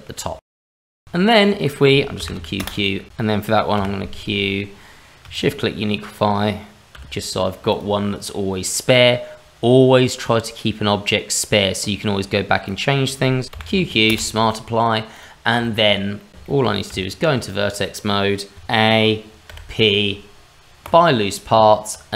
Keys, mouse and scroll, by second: 0.7 scroll down 2, 0.9 shift+middle click, 1.1 click, 1.3 middle click, 2.2 q, 2.4 q, 3.1 ctrl+shift+z, 3.1 click, 3.2 shift+middle click, 3.7 q, 8.9 click, 12.6 click, 13.5 q, 13.6 q, 15.1 click, 15.6 shift+middle click, 16.2 middle click, 16.3 scroll up 2, 16.3 q, 16.4 shift+middle click, 16.9 Tab, 18.5 a, 19.5 p, 21.5 Tab.